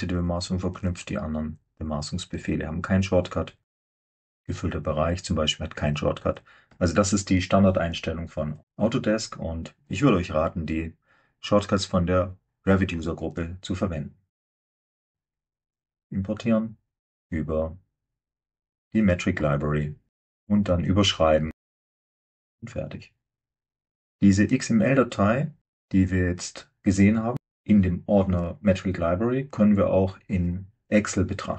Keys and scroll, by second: 14.3 typing.